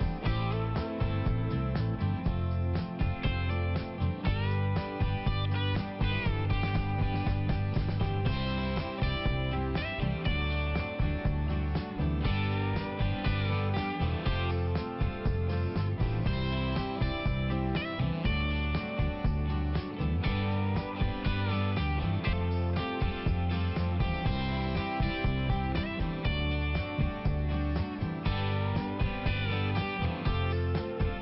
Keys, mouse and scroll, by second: 1.7 click, 2.8 click, 3.6 click, 3.9 click, 4.0 double click, 4.2 double click, 4.6 double click, 4.7 double click, 4.9 double click, 5.3 double click, 5.9 double click, 6.0 double click, 6.9 double click, 7.2 double click, 7.3 double click, 7.5 double click, 7.9 double click, 7.9 double click, 8.2 double click, 8.6 double click, 8.7 double click, 8.9 double click, 10.4 click, 11.4 click, 13.7 right click, 14.8 click, 15.4 click, 16.7 click, 16.8 click, 19.0-19.8 scroll down 1, 20.5 click, 22.7 middle click, 25.7 click, 26.5 click, 27.6 scroll up 1, 28.9 click.